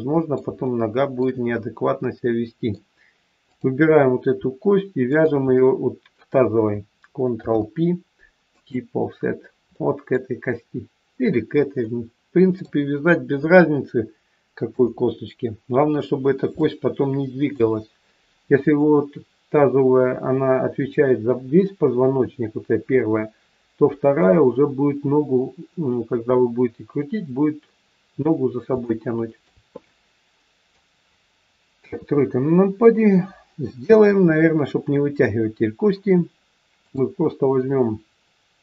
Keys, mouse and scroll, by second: 0.6 shift+middle click, 1.6 middle click, 3.4 click, 5.0 shift+click, 7.3 ctrl+p, 9.3-9.7 scroll up 4, 9.7 middle click, 11.8 middle click, 13.3 KP_1, 13.9-14.7 scroll down 3, 14.7 KP_3, 15.4-16.4 scroll down 1, 16.5 shift+middle click, 28.8 shift+middle click, 29.8 middle click, 31.8 KP_3, 32.3-32.9 scroll down 1, 36.8 click.